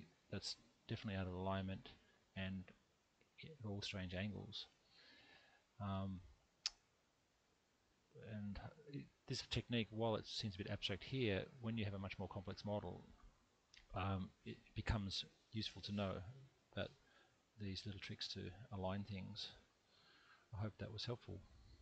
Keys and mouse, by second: 3.7-8.0 middle drag, 11.1 1, 12.0-13.3 middle drag, 18.1 middle click.